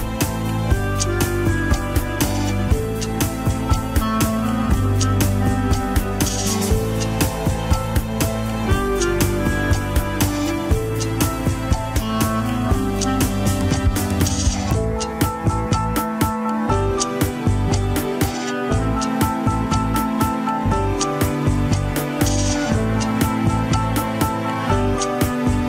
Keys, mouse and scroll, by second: 0.0 scroll down 1, 1.2 click, 1.4 scroll up 4, 1.7 middle click, 2.2 scroll up 1, 2.3 ctrl+Tab, 2.5-3.1 middle drag, 3.1 scroll up 2, 3.3 alt+z, 3.5-4.1 middle drag, 4.1 alt+z, 4.3 scroll up 1, 4.3-5.5 middle drag, 5.5 scroll down 1, 5.6 KP_1, 6.4-7.9 drag, 7.9 scroll down 2, 8.2-9.1 middle drag, 9.1 click, 10.1 r, 15.4 KP_1, 15.5 scroll down 2, 16.1 shift+middle click, 16.2 scroll up 2, 17.0-17.3 drag, 17.7 r, 21.8 drag, 23.1 click, 23.8 r.